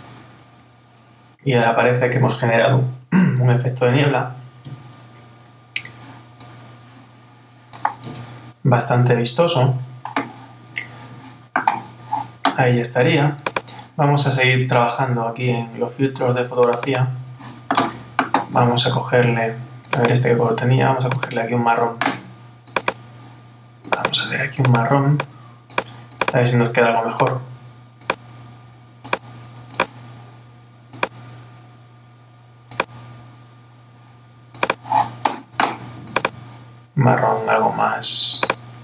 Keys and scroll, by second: 3.4 super++, 4.6 Tab, 8.0 Tab.